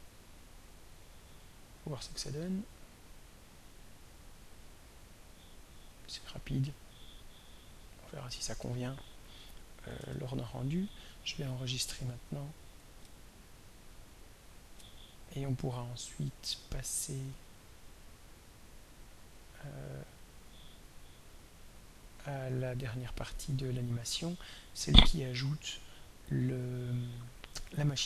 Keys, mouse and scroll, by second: 1.6 click, 3.4 click, 5.0 click, 7.6 click, 10.0 ctrl+s, 12.9-14.9 middle drag, 18.4 click, 20.1 click, 22.2 click.